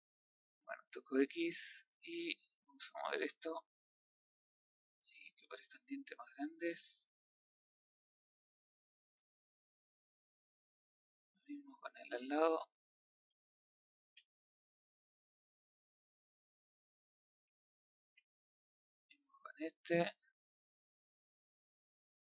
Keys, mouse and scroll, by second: 3.4 click, 4.5 click, 6.1-6.4 scroll down 2, 6.4-7.7 middle drag, 7.7 scroll up 1, 7.9 scroll down 3, 8.1-10.1 middle drag, 10.1 scroll up 2, 10.6-11.8 middle drag, 11.8-12.1 scroll up 1, 12.1 middle click, 12.5 z, 13.3 middle click, 14.0 a, 14.1-15.5 middle drag, 15.5 b, 16.3 click, 17.4 middle click, 18.0 a, 20.3-21.3 drag.